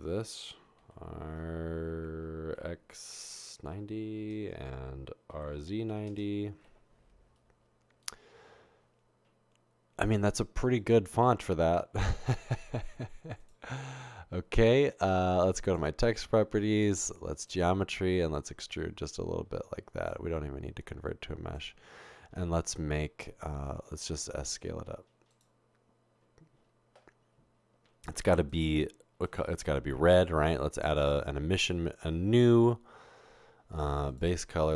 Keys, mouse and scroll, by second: 0.8-5.9 typing, 4.3 Return, 6.1 Return, 17.4 click, 18.4-21.6 drag, 25.3 s, 31.6 click, 32.7-34.1 scroll down 2, 34.1 click.